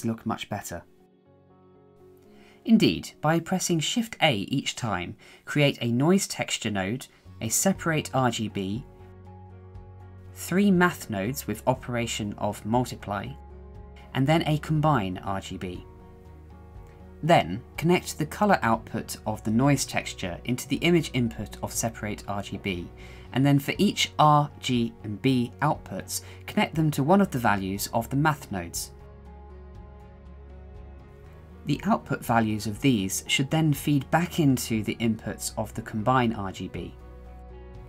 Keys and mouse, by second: 1.3 shift+a, 2.9 click, 3.6 shift+a, 7.9 click, 9.0 shift+a, 11.3-11.7 drag, 12.6 click, 13.0 shift+d, 13.5 shift+d, 13.9 click, 14.1 shift+middle click, 14.4 click, 15.0 click, 19.0-19.7 drag, 20.8-21.7 drag, 22.5-23.4 drag, 24.0-25.2 drag, 26.1 shift+middle click, 27.7 click, 28.1 shift+a, 32.5-33.2 drag, 33.9-34.4 drag, 35.3-36.0 drag, 36.6 shift+middle click, 37.7 click.